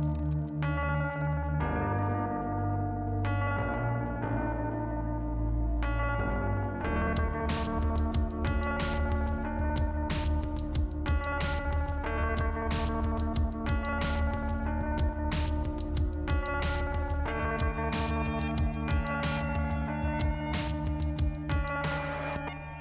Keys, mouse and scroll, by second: 4.3 click, 6.8 click, 12.1 alt+t, 14.2 click, 19.3 click, 22.3 click.